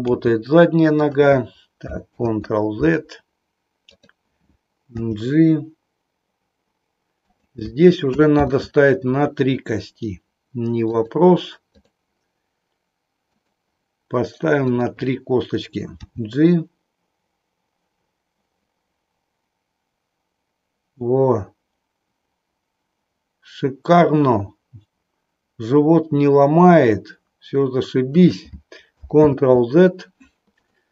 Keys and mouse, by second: 0.0 g, 2.0 ctrl+z, 4.9 g, 7.4 click, 8.3 ctrl+z, 14.7 click, 15.9 g, 28.2 click, 29.2 ctrl+z, 30.8 middle click.